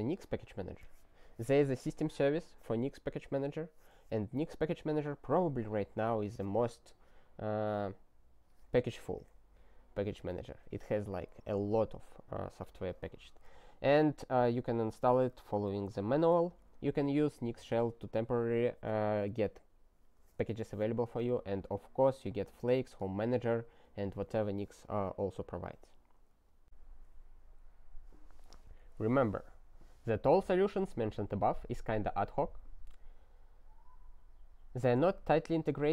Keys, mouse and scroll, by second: 14.7 click, 15.2 ctrl+space, 15.3 ctrl+p, 15.9 ctrl+n, 16.3 ctrl+n, 17.2 ctrl+n, 22.1 ctrl+space, 22.2 ctrl+e, 22.8 ctrl+g, 26.6 BackSpace.